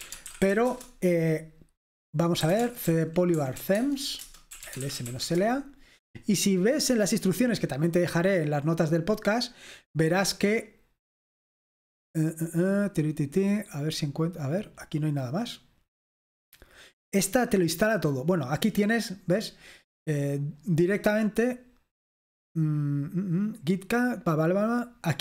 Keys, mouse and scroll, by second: 0.0-1.0 typing, 2.2-5.6 typing, 4.2 Return, 7.1-8.5 scroll down 2, 8.5-9.1 scroll down 1, 9.4-10.3 scroll down 2, 10.3-11.7 scroll down 1, 11.7-14.2 scroll down 6, 14.2-15.1 scroll up 2, 15.1-16.4 drag.